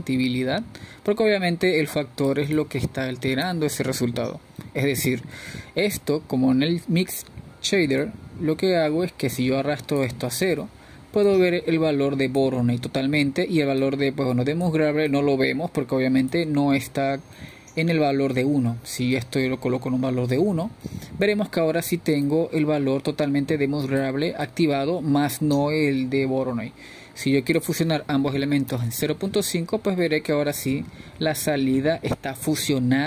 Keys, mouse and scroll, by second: 3.1-33.0 drag.